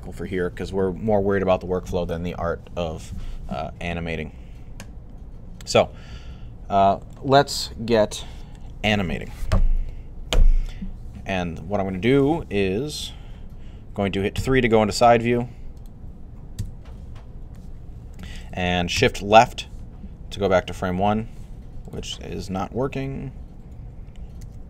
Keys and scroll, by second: 14.2 3, 24.2 c.